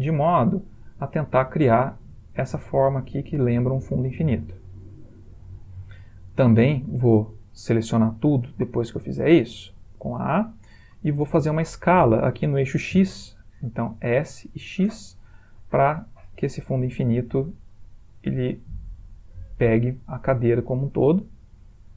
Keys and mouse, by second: 0.2 e, 1.9 middle click, 4.7 middle click, 5.2 middle click, 5.3 middle click, 9.1 middle click, 9.9 a, 14.3 s, 17.4 middle click, 17.6 middle click.